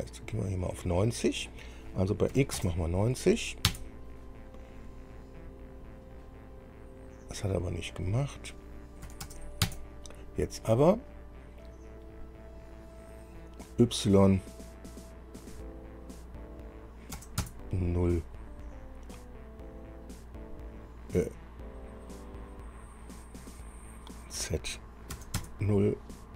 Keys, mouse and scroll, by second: 2.5 KP_9, 3.9 Return, 9.3 KP_9, 9.4 KP_0, 17.4 KP_0, 25.4 KP_0, 25.6 KP_Enter.